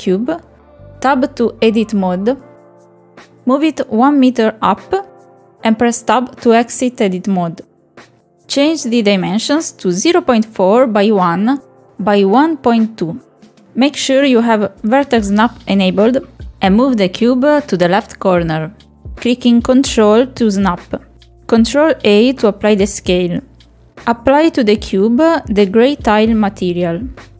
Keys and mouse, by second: 1.5 shift+a, 5.1 Tab, 6.5 click, 7.1 click, 8.4 Tab, 10.3 click, 11.5 click, 12.5 click, 14.1 middle click, 14.6 middle click, 14.8 ctrl+click, 16.9-18.0 drag, 18.5 ctrl+click, 21.1 ctrl+a, 22.3 click, 22.9-24.8 drag.